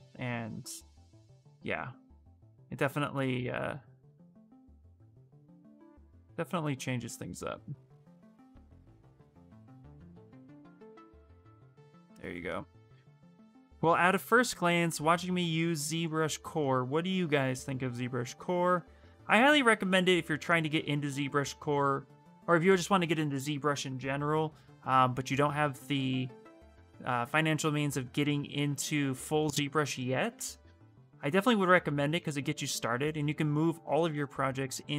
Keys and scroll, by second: 6.1 s, 28.1 /.